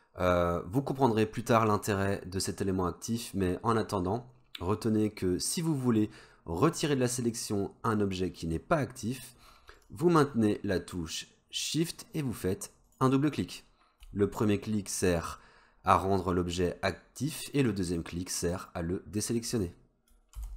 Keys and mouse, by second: 12.9 shift+click, 13.0 shift+click.